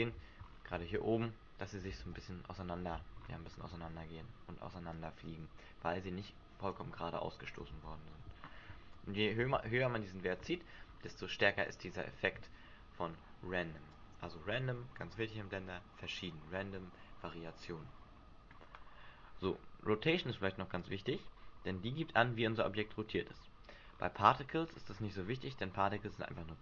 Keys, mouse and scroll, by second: 0.3-0.9 scroll down 7, 2.0 alt+a, 3.1-3.5 scroll up 7, 3.5 Escape, 4.9 click, 7.7 alt+a, 8.5 Escape, 8.9 click, 9.5 alt+a, 10.8-11.6 scroll down 6, 11.5-12.1 scroll up 8, 12.4 Escape, 13.9 click, 20.8 click, 23.8 scroll up 3, 25.6 scroll up 3.